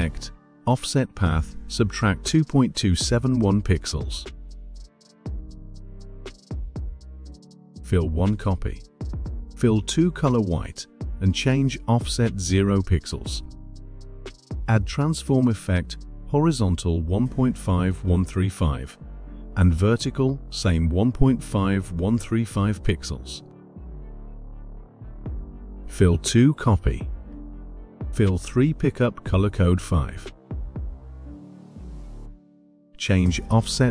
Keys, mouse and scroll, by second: 1.1 click, 2.0-4.9 typing, 6.8 click, 10.2 click, 12.6 click, 16.3 click, 18.1-24.3 typing, 20.7 click, 25.2 click, 29.9 click, 32.0 click.